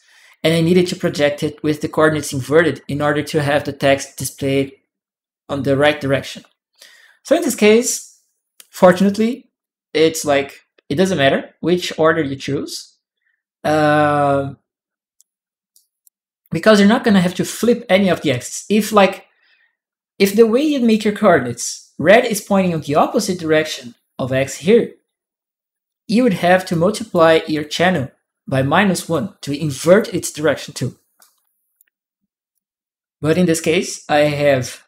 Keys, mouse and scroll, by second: 0.1 click, 8.7 click, 9.4 click, 10.0 click, 15.5 click, 20.4 click, 26.5 click, 27.7-28.9 drag, 30.9 right click, 32.3 right click, 34.0 right click, 34.0 click.